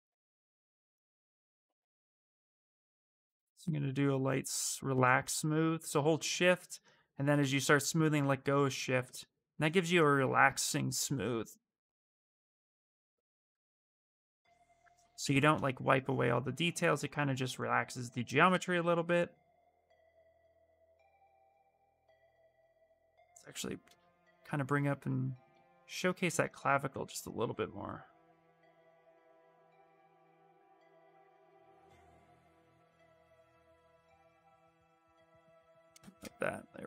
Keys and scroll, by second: 30.4 s, 31.2 s.